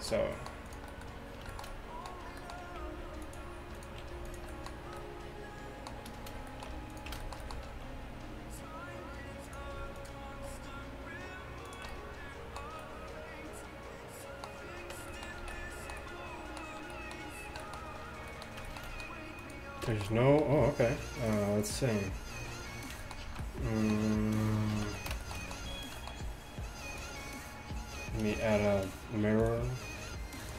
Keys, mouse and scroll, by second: 0.7 click, 1.6 click, 2.8 g, 4.1 g, 4.8 middle click, 7.7 alt+s, 10.3 alt+s, 14.0 middle click, 15.0 Tab, 15.4 a, 18.5-23.6 middle drag, 19.5-20.3 right drag, 22.2 z, 23.3 z, 24.8 alt+h, 25.7 a, 28.3 space.